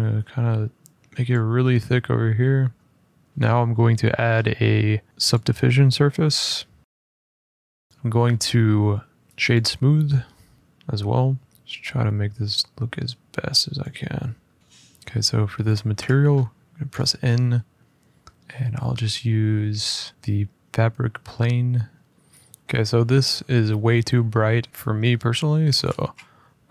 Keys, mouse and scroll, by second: 1.0-1.9 drag, 1.9-2.2 scroll up 1, 2.2 middle click, 3.3 click, 5.1 click, 6.8 click, 7.9 click, 9.3 click, 13.5 click, 14.5 middle click, 15.3 click, 15.7 n, 16.7 middle click, 16.7 middle click, 16.7 middle click, 17.0 middle click, 17.0-17.4 scroll, 17.8 click, 17.8 scroll, 20.1 click, 20.1 scroll, 22.1-22.6 scroll, 22.6 click, 24.7 click, 24.8 click, 25.3 middle click, 25.6 click, 25.8 a.